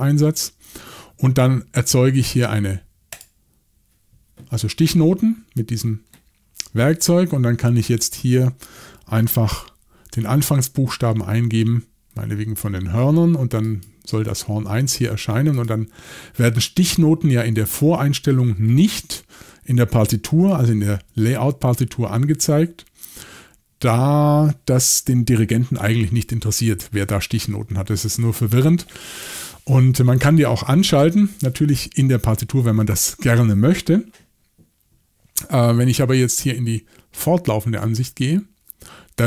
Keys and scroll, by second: 9.5 h, 20.3-21.1 typing.